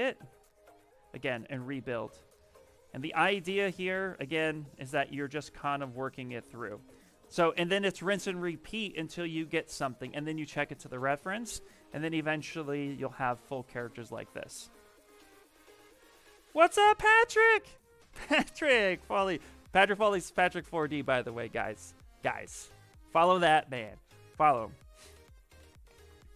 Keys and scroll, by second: 1.7 s, 4.1-5.2 typing.